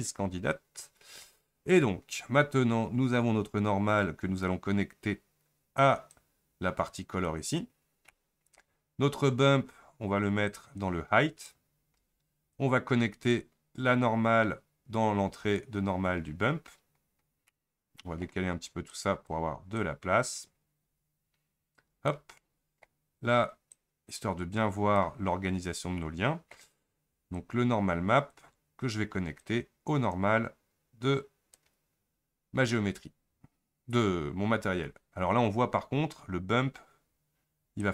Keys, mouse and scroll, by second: 6.2-7.3 drag, 10.5-11.6 drag, 15.6-31.7 drag.